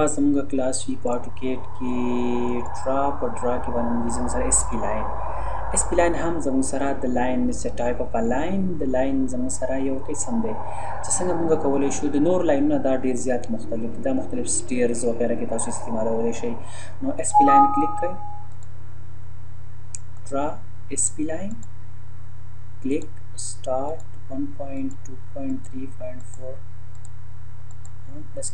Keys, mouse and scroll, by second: 1.1 click, 17.2 click, 25.5 click.